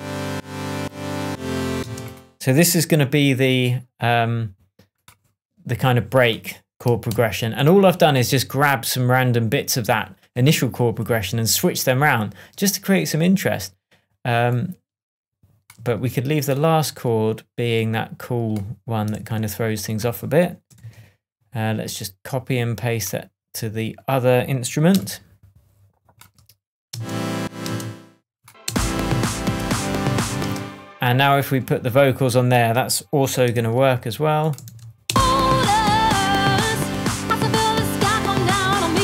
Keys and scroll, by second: 1.8 space, 7.0 super+d, 15.8 super+v, 19.1 super+c, 20.7 super+v, 21.1 super+v, 26.8 alt+space, 27.4 space, 29.3 shift+space, 29.5 shift+Tab, 30.4 shift+space, 31.0 space, 33.5 super+c, 35.0 super+space, 35.8 space.